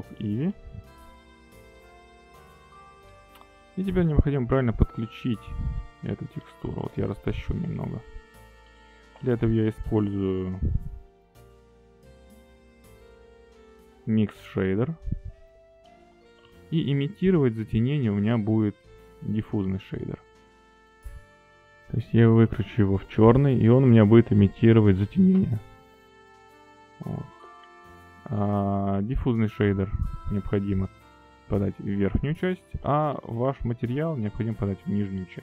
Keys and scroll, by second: 6.0 g, 11.1 shift+a, 17.0 g, 18.5 shift+a, 26.6 g, 29.0 g.